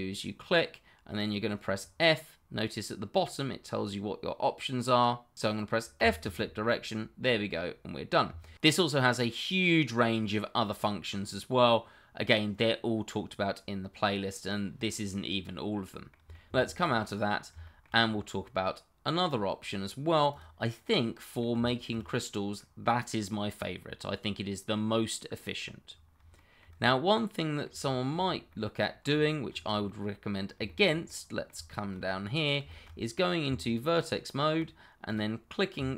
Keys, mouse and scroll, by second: 2.6 click, 6.0 click, 7.2 middle click, 8.4 shift+middle click, 8.7 scroll down 1, 8.9 middle click, 9.8-10.6 scroll up 2, 14.5 scroll down 1, 16.0 middle click, 16.5 Escape, 16.8 click, 17.6 shift+middle click, 17.7 middle click, 20.3 click, 20.8 middle click, 21.6 shift+middle click, 22.0-22.5 scroll up 1, 22.5 middle click, 25.8-26.3 scroll down 1, 26.3 shift+middle click, 27.0 middle click, 28.0 shift+middle click, 28.1-28.5 shift+scroll up 2, 28.5 middle click, 29.4 shift+middle click, 29.8 middle click, 30.6 shift+middle click, 30.7 middle click, 31.8 shift+middle click, 32.7 middle click, 33.4 Tab, 35.0 click.